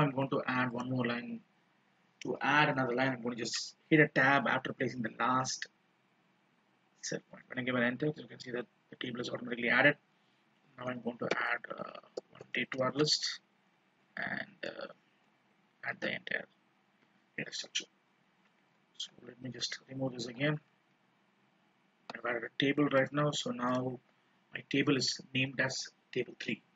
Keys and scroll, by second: 15.2 ctrl+shift+Down, 16.1 ctrl+d, 19.2 ctrl+z.